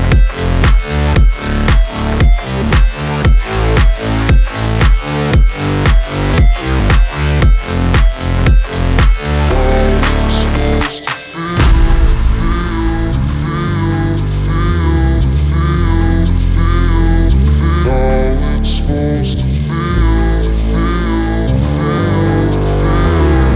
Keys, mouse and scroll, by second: 4.0 shift+a, 7.4 s, 8.0 s, 10.0 click, 12.8 click, 14.4 Tab, 15.7 ctrl+r, 21.2 right click, 22.0 right drag, 22.0 click.